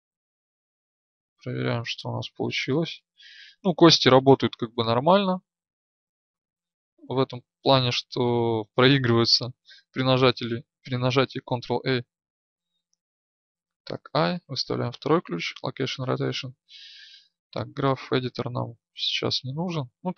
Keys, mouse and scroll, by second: 0.2-3.4 Left, 4.3-5.8 Right, 8.1-10.1 drag.